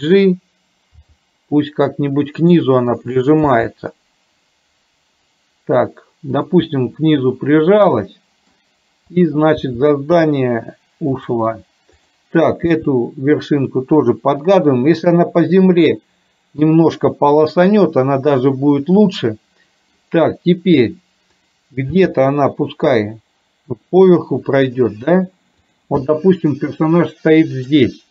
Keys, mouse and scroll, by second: 1.2 g, 3.6 g, 6.7-8.7 middle drag, 9.8 g, 12.1 click, 15.8 middle click, 17.5-20.1 middle drag, 21.4 click, 22.1 g, 26.7-27.8 middle drag.